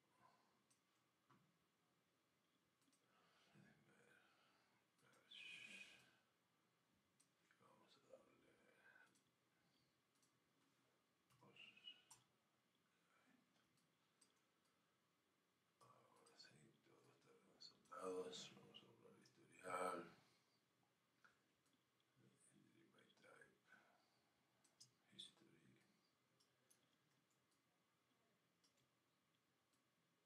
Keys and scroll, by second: 12.1 Return, 14.3 Return.